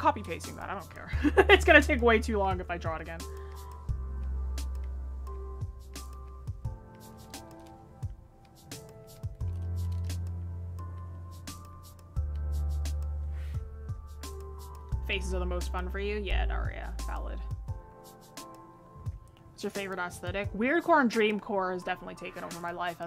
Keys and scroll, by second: 18.9 ctrl+z.